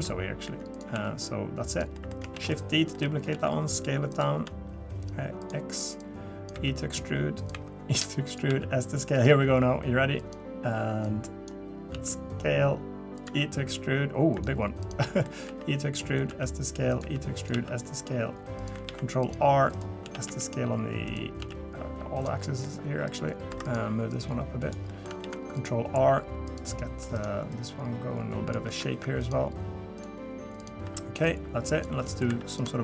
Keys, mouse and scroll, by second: 0.4 e, 0.9 s, 1.9 middle click, 2.3 shift+d, 2.9 middle click, 3.3 s, 4.3 s, 6.0 click, 6.5 e, 7.5 e, 8.5 s, 9.3 e, 11.0 click, 11.9 s, 13.2 e, 14.8 click, 15.0 middle click, 15.5 e, 16.3 s, 17.0 e, 17.5 s, 18.9 ctrl+r, 20.0 s, 21.4 s, 22.4 middle click, 23.1 click, 23.5 3, 23.6 click, 24.1 click, 24.9 middle click, 25.2 ctrl+r, 27.1 click, 27.5 click, 28.9 ctrl+r, 30.6 click, 30.8 2, 31.2 click, 32.0 middle click, 32.3 3, 32.5 click.